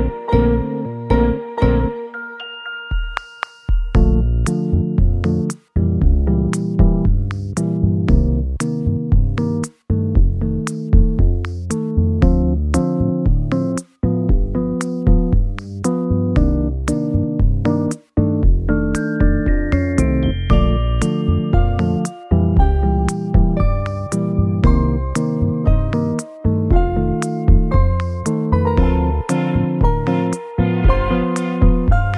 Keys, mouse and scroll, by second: 0.1 g, 0.9 x, 2.1 KP_3, 2.9 scroll down 1, 3.4 scroll down 1, 3.5-4.5 scroll up 1, 5.0 w, 5.0 r, 9.2 g, 9.9 y, 11.6 middle click, 12.1-12.8 scroll down 6, 13.1 middle click, 15.0 KP_7, 15.4 KP_7, 15.8 shift+middle click, 17.2 r, 19.4 g, 22.0 r, 23.5 middle click, 24.8 scroll down 1, 25.6-27.6 scroll up 1, 27.6 KP_0, 30.9 g.